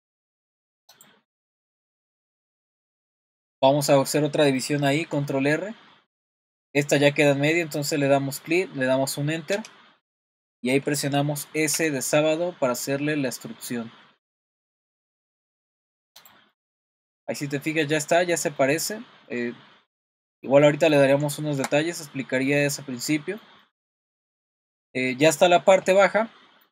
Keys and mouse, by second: 1.4 click, 1.7 middle click, 2.4 middle click, 5.1 super+r, 11.7 s, 16.2 click, 16.5 middle click, 17.6 middle click, 18.6 middle click, 19.3-20.5 middle drag, 20.7 middle click, 22.5 middle click, 23.7 middle click, 24.3 middle click, 25.2 middle click.